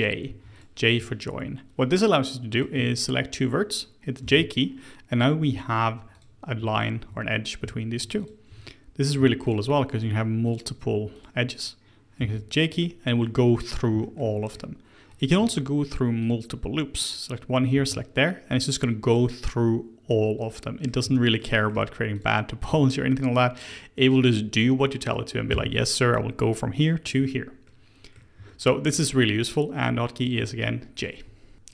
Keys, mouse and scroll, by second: 0.2 1, 0.5 click, 2.5 shift+click, 4.2 j, 6.1 click, 6.7 shift+click, 8.2 click, 9.0 click, 9.4 shift+click, 9.9 shift+click, 10.4 shift+click, 11.1 shift+click, 12.2 j, 12.8-15.1 middle drag, 15.1 click, 16.2 shift+click, 17.7 j, 20.1-22.1 middle drag, 22.1 click, 24.0 shift+click, 25.5 j, 27.6-30.2 middle drag, 30.2 click, 31.0 shift+click, 31.5 ctrl+z.